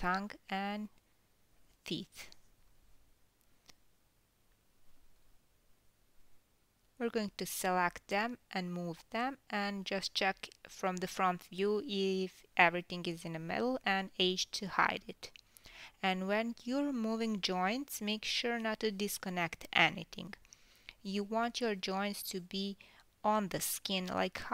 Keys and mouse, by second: 1.8 click, 2.8 shift+click, 3.5 click, 4.3 g, 6.2 shift+click, 6.8 shift+click, 8.9-12.0 middle drag, 10.4 l, 11.3 KP_1, 13.8 h, 15.6-16.7 middle drag, 18.3 KP_6, 20.7-22.2 drag, 22.2-23.6 middle drag, 23.7 KP_3.